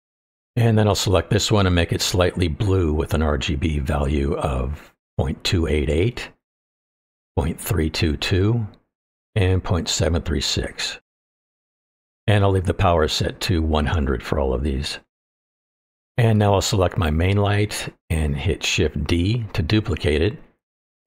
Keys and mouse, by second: 1.9 click, 6.2 KP_8, 8.8 KP_2, 18.9 shift+d, 20.5 click.